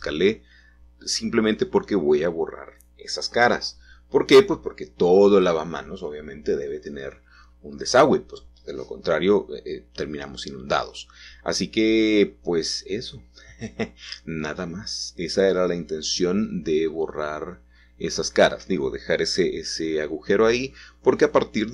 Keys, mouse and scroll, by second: 1.1 x, 2.2 click, 3.7 middle click, 5.6-6.3 scroll down 2, 6.3-7.3 shift+middle drag, 8.1-9.5 middle drag, 9.5 ctrl+shift+s, 10.6 KP_Add, 14.8 Return, 16.1-17.4 middle drag, 17.4-17.8 scroll up 1, 18.3-20.4 shift+middle drag.